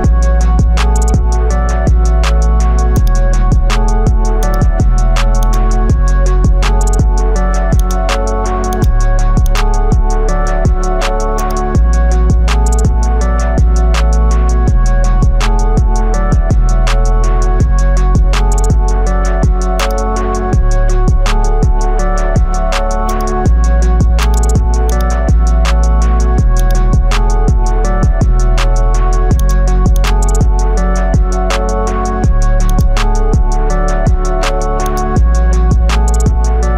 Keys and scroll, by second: 27.8 ctrl+i, 33.7 x, 36.2 ctrl+alt+z.